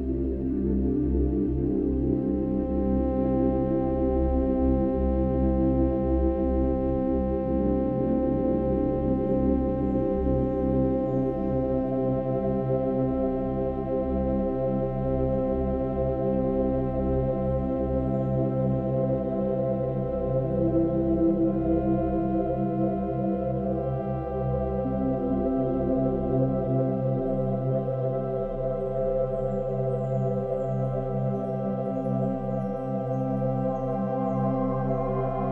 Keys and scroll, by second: 2.5 ctrl+-, 2.6 ctrl+=, 7.0 ctrl+=, 7.2 space, 8.1 space, 9.7 ctrl+-, 10.1 ctrl+-, 10.5 space, 11.3 ctrl+alt+shift+n, 11.5 ctrl+alt+g, 21.9 space, 32.3 ctrl+-.